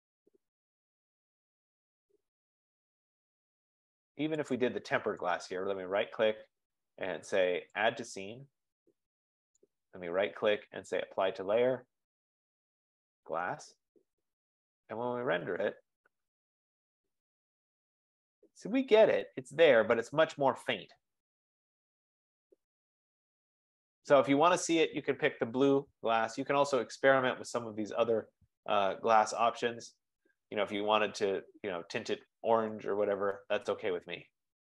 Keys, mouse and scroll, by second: 1.7 scroll, 4.7 click, 5.4 right click, 7.9 click, 10.2 right click, 13.6 click, 15.1 F15, 15.1 click, 16.0 click, 27.6 click, 29.2-30.2 scroll, 30.4 scroll, 30.5-31.2 scroll down 11, 33.3-34.7 scroll up 11.